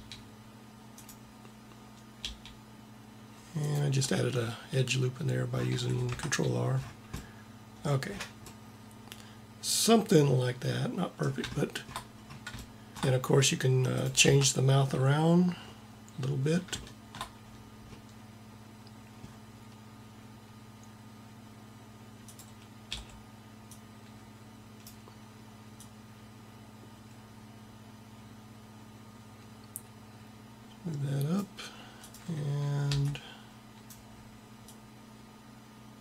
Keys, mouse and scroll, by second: 2.2 g, 5.6 a, 6.1 Tab, 14.2 Tab, 22.2-23.8 drag, 22.7 b, 25.6-27.5 drag, 31.9-33.7 drag, 32.7 b, 34.7-36.0 drag.